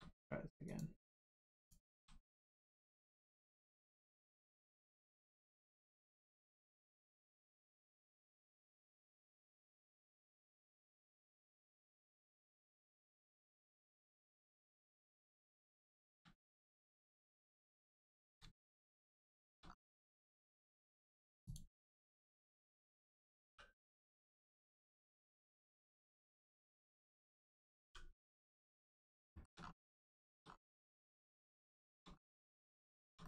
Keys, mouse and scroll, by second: 0.6 click, 0.7 click, 1.9 a, 2.8 click, 5.4 click, 8.5 click, 9.2-9.6 scroll up 1, 9.8 shift+middle click, 12.1 shift+click, 15.8 shift+middle click, 16.8 click, 17.7 shift+middle click, 18.6 shift+middle click, 19.6 scroll up 1, 20.2 shift+middle click, 21.4 click, 23.4 3, 24.0 click, 24.8 scroll up 1, 25.2 shift+middle click, 25.6 scroll up 1, 26.1 middle click, 27.8 g, 28.6 right click, 28.9 middle click, 29.3 shift+middle click, 29.6 scroll up 1, 30.1 shift+middle click, 30.4 scroll up 1, 30.9 middle click, 31.8 shift+middle click, 32.1 scroll up 1, 32.7 shift+middle click, 33.2 middle click.